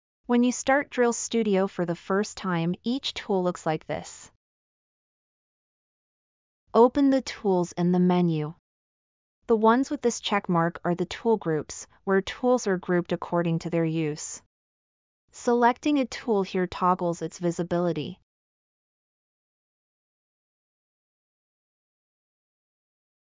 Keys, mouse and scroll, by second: 20.0 click, 21.8 click, 22.3 click.